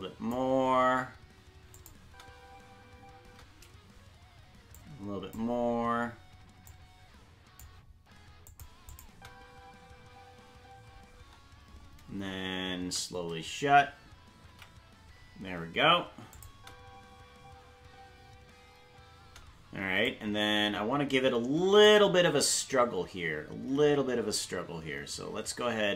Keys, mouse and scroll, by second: 1.7 click, 2.0 space, 4.8-5.4 drag, 4.8 space, 6.7 click, 8.5 click, 8.9 click, 9.1 space, 14.5 alt+r, 14.5 space, 16.3-19.3 drag, 16.5 space, 19.3 space, 20.1-21.9 drag.